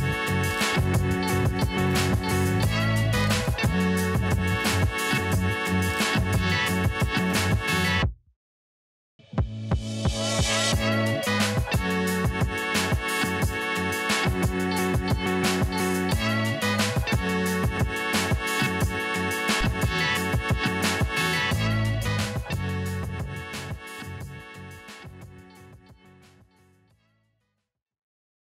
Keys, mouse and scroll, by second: 1.2 Up, 3.0 click, 5.5 ctrl+s, 10.3 right click, 11.1 click, 11.1 click, 12.6 ctrl+s.